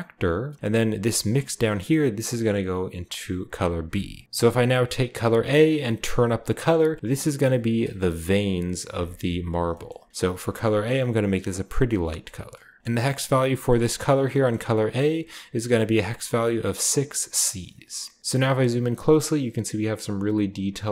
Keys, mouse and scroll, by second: 0.9 click, 1.9-3.6 drag, 4.0 click, 5.0 click, 6.1-7.7 drag, 8.9-10.6 shift+middle drag, 9.1-10.6 shift+scroll up 1, 10.6 click, 10.6 scroll up 1, 11.7 click, 12.8 ctrl+v, 12.8-13.6 scroll down 1, 12.8 c, 13.7-16.8 scroll up 1, 14.7-16.8 drag, 17.7 scroll down 1, 18.1 scroll up 2.